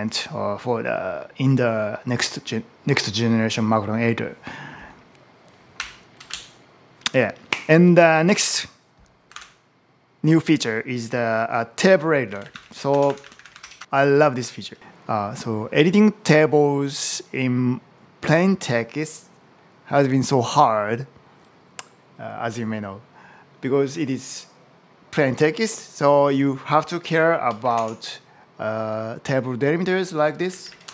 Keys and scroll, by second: 5.6 Up, 6.1 super+Down, 9.2 super+n, 11.8-13.8 typing, 14.8 Return, 27.5 shift+\, 27.6 space, 30.0-30.9 typing.